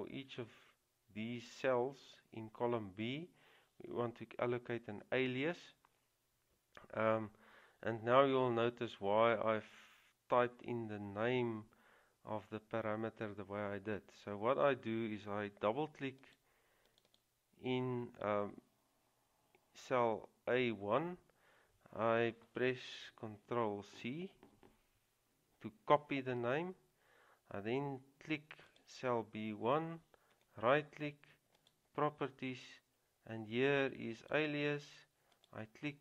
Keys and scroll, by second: 24.3 ctrl+c.